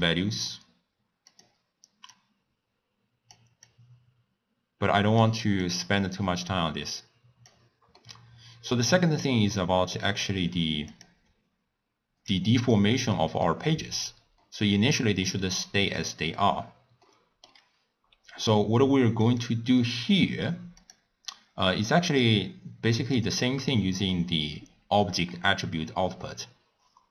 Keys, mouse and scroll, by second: 2.1-8.0 drag, 8.0-11.0 middle drag, 11.0 click, 13.2-19.3 middle drag, 19.3 click, 20.8 click, 22.1 click, 23.2 click, 24.1 click.